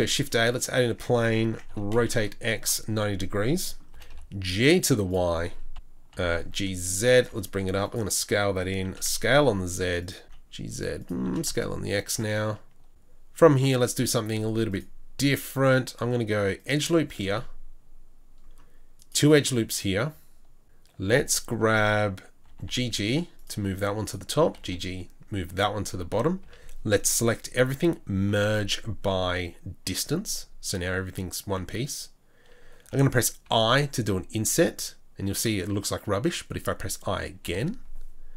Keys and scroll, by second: 1.4 Tab, 1.7 r, 3.9 g, 5.7 KP_3, 5.7 KP_1, 6.1 g, 7.3 s, 9.1 s, 10.2 g, 11.2 s, 14.2 ctrl+r, 17.2 ctrl+r, 20.9 1, 22.4 g, 24.4 g, 26.4 a, 28.1 m, 33.4 i.